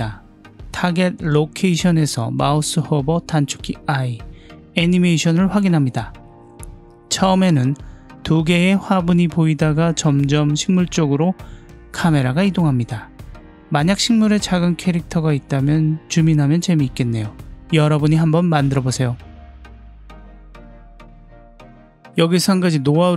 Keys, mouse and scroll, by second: 3.1 i, 6.3-8.5 drag, 8.6 space.